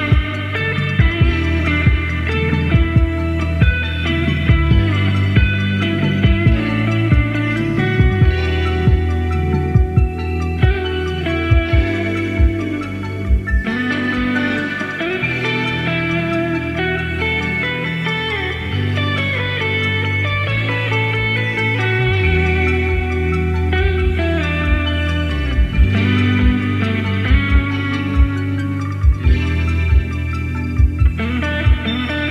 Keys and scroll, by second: 30.1 d, 31.8 Left, 31.9 Left, 32.1 Left.